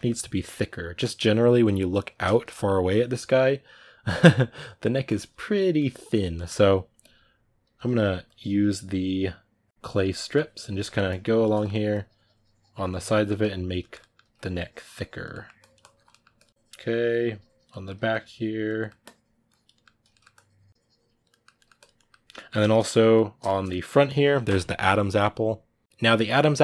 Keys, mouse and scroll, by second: 7.5 f, 10.1 click, 10.4 ctrl+middle click, 10.9 click, 11.3 ctrl+middle click, 11.7-13.0 drag, 13.0-14.2 ctrl+middle drag, 14.2 click, 15.1 middle click, 15.4 click, 15.9 middle click, 16.1 click, 16.3 middle click, 16.5 click, 17.5 middle click, 17.9 click, 18.6 middle click, 18.8 click, 19.5 middle click, 20.1 click, 21.1 ctrl+middle click, 21.6 click, 21.7-26.6 middle drag.